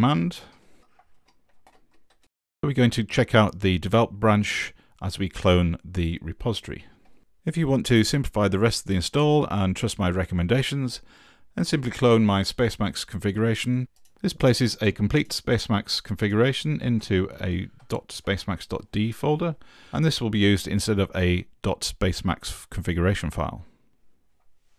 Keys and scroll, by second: 0.0 Right, 0.2 Right, 0.7-2.4 typing, 16.9 super+2, 17.8 ctrl+v, 18.2 Return.